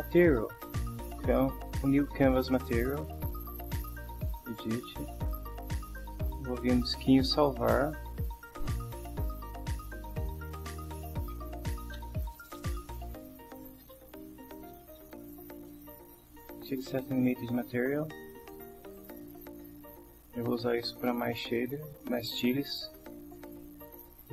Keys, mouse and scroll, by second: 0.9 click, 2.7 click, 3.6 click, 4.6 click, 6.9 click, 7.6 click, 9.8-15.9 typing, 18.9 click.